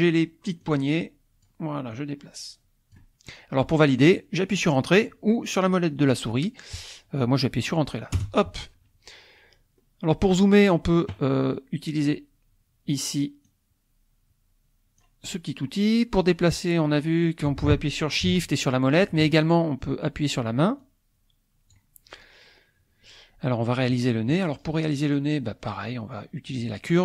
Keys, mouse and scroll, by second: 0.7-1.8 drag, 2.0-3.1 drag, 8.2 Return, 9.8 scroll up 1, 10.5 scroll down 1, 13.5-15.2 drag, 16.2-17.8 drag, 18.5 shift+click, 20.8-21.9 drag, 22.6 scroll up 1, 26.5 click.